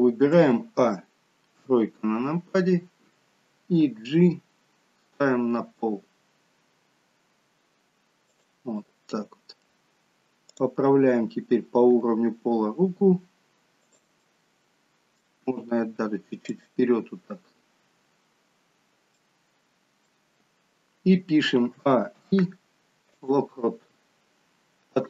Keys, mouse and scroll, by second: 0.4 a, 1.7 KP_3, 4.1 g, 8.9 middle click, 10.6 click, 12.0 g, 14.3 middle click, 15.6 g, 19.3 middle click, 21.8 a, 22.5 i, 23.7-24.8 scroll down 3, 24.8-25.0 scroll down 1.